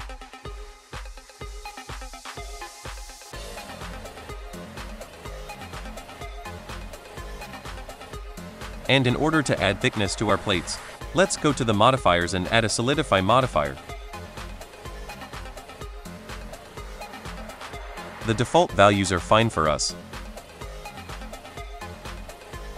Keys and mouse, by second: 1.3 shift+click, 1.7 shift+click, 2.6 shift+drag, 3.3 space, 4.7 space, 5.5 shift+click, 6.9 click, 7.3-7.6 drag, 8.0-9.2 drag, 9.4-10.1 drag, 10.2 drag, 10.7-11.1 drag, 11.3 click, 11.6 click, 11.9 click, 12.7 click, 13.5-15.6 drag, 18.3 shift+middle drag, 19.3 shift+middle drag, 20.7 shift+middle drag, 21.1 shift+middle click.